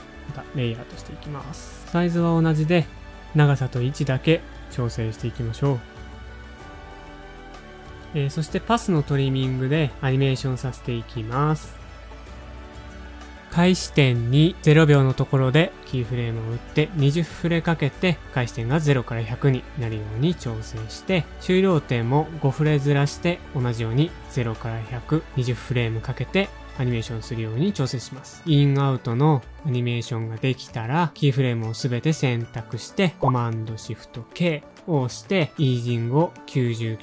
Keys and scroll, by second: 3.5 shift+super+a, 4.5 super+Up, 4.7 ctrl+a, 7.1 super+Up, 7.2 ctrl+a, 13.4 Page_Down, 13.4 super+z, 17.4 shift+Page_Down, 19.8 alt+shift+Right, 20.4 Home, 21.0 space, 21.4 Page_Down, 21.5 Page_Down, 21.6 Page_Down, 21.7 Page_Down, 21.8 Page_Down, 23.9 shift+Page_Down, 24.0 shift+Page_Down, 34.8 shift+super+k, 36.5-37.0 typing.